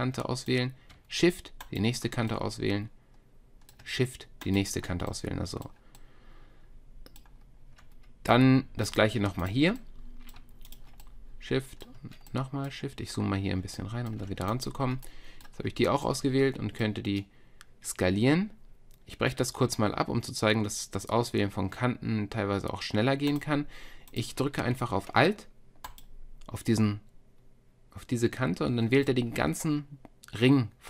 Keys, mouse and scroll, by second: 3.1-6.0 middle drag, 8.8-11.6 middle drag, 12.3-14.5 middle drag, 15.1 click, 15.6-18.2 middle drag, 18.2 s, 24.1-29.3 middle drag.